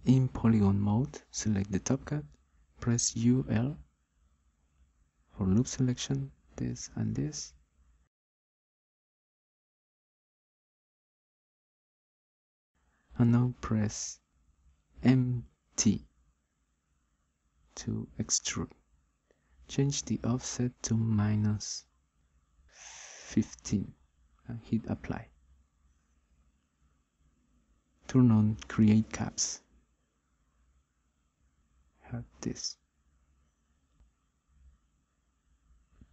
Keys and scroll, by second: 4.8 u, 5.9 l, 14.6 m, 15.6 t, 22.8 1.